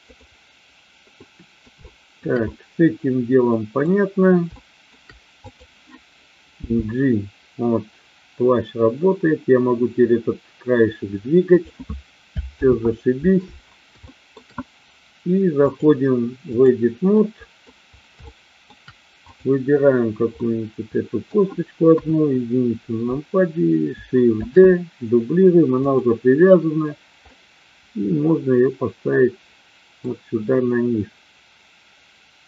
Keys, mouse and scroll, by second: 0.0 click, 1.2-1.7 middle drag, 1.8-2.2 shift+middle drag, 2.5-3.8 middle drag, 4.4 shift+middle click, 5.4-6.3 drag, 6.5 g, 11.4 click, 12.4 ctrl+z, 14.0 shift+middle click, 15.7-16.7 drag, 17.2 middle click, 18.2 shift+middle click, 19.3 click, 20.4-21.4 middle drag, 21.8 KP_1, 24.4 shift+d, 25.9 click, 27.3-30.0 middle drag.